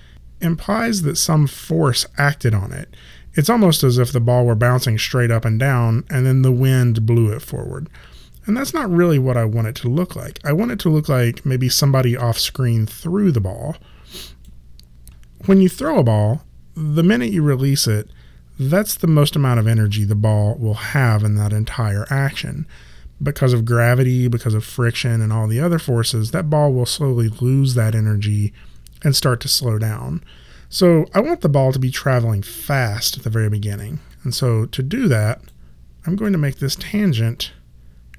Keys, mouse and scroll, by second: 3.6 click, 34.0 click, 36.2 middle click.